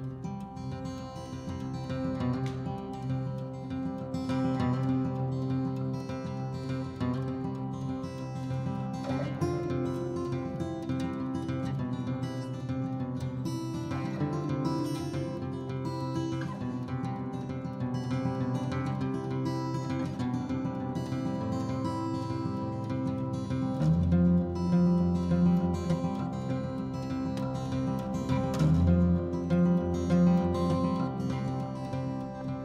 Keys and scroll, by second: 22.7 b.